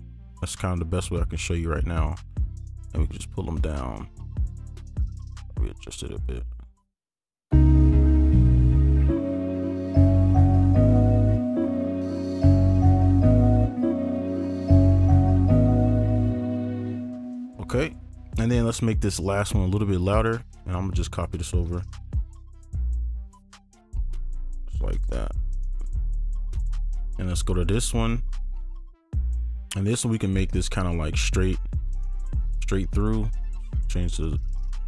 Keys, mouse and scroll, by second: 1.8-4.6 alt+scroll down 1, 5.4 right click, 11.1-11.4 alt+scroll up 1, 11.4 alt+space, 12.8 right click, 13.8 space, 16.1 right click, 16.4 ctrl+click, 19.5-20.1 alt+scroll up 1, 20.4 ctrl+a, 21.3 shift+click, 25.0 right click, 25.0 shift+click, 28.1 right click.